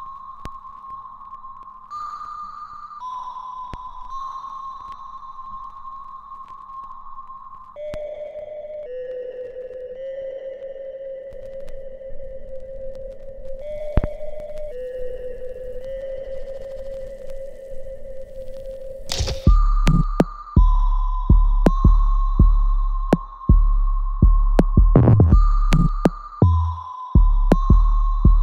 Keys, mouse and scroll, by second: 0.8 scroll up 1, 1.4 shift+middle click, 4.3 middle click, 4.7-5.1 scroll up 1, 5.1 scroll down 1, 7.8 click, 10.0 Escape, 11.0 click, 15.8-16.6 scroll, 16.6-19.8 scroll down 1, 20.2 scroll down 1, 20.9 scroll up 1, 22.8 click, 24.4 shift+middle click, 27.6 click.